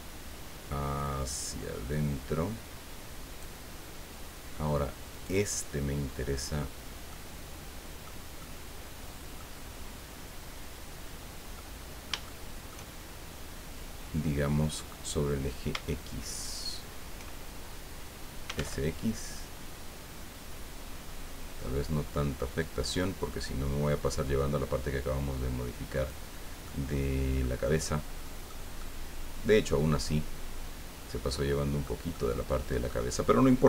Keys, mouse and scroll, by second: 0.2 scroll down 2, 1.6-1.9 scroll down 2, 5.1 right click, 7.1-8.2 middle drag, 8.4-9.5 middle drag, 10.1-10.5 scroll up 2, 11.6-12.8 middle drag, 16.4 shift+right click, 18.4 s, 18.5 x, 20.8-21.2 scroll up 2, 22.5 scroll up 2, 25.0 scroll down 2, 25.9 click, 26.3 scroll down 2, 26.6 middle click, 28.8-32.0 middle drag, 32.1 middle click.